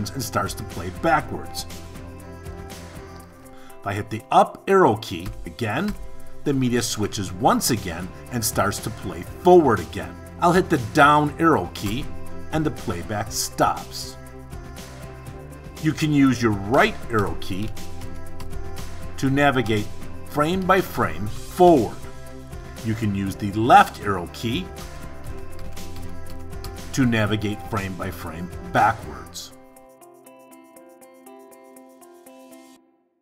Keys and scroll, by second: 3.5 Up, 10.1 Down, 16.2 Right, 23.6 Left.